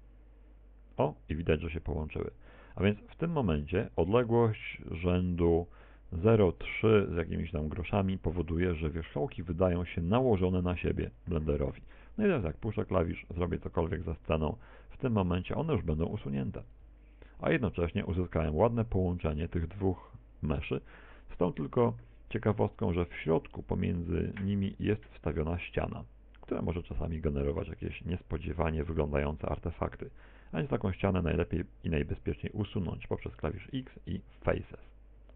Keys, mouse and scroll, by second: 19.5 middle click, 20.6 right click, 21.4 g, 23.0 right click, 23.2 g, 24.0 middle click, 29.5 right click, 30.0 shift+right click, 30.5 shift+right click, 30.7 shift+right click, 33.1 Tab, 33.9 a, 35.0 middle click.